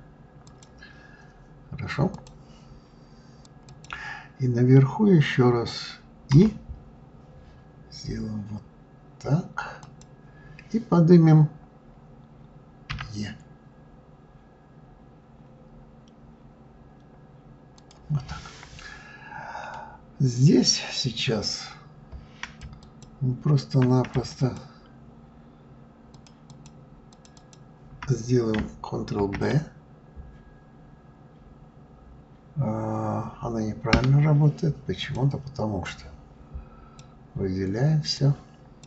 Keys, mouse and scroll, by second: 19.4-22.1 middle drag, 22.1 click, 22.5 shift+click, 23.8 click, 24.1 shift+click, 25.8 shift+click, 26.2 shift+click, 26.8 shift+click, 27.0 shift+click, 28.9 ctrl+b, 34.7 click, 35.6 click.